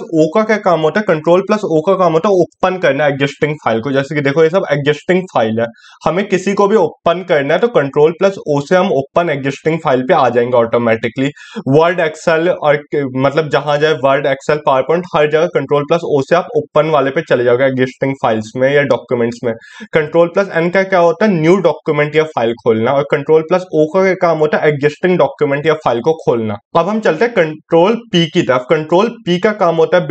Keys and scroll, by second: 27.4 ctrl+p.